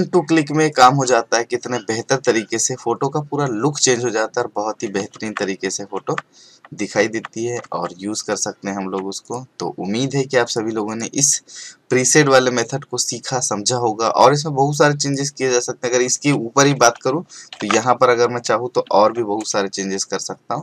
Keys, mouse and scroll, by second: 0.7 click, 5.1 ctrl+Tab, 9.2 click, 15.0 click, 16.7 ctrl+j, 17.5 ctrl+shift+l, 18.9 ctrl+l.